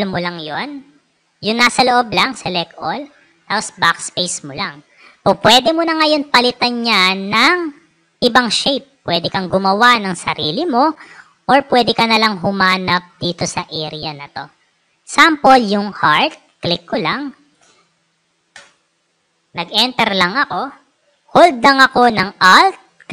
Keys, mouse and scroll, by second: 1.8-2.9 drag, 3.6 BackSpace, 5.9 right click, 7.0 click, 8.2 click, 15.9 click, 18.4 Return, 22.8-23.1 alt+drag.